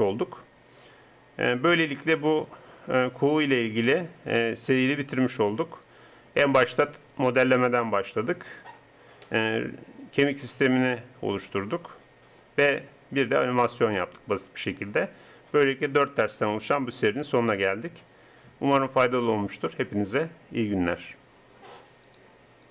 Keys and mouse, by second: 3.9 click, 5.9-7.3 middle drag.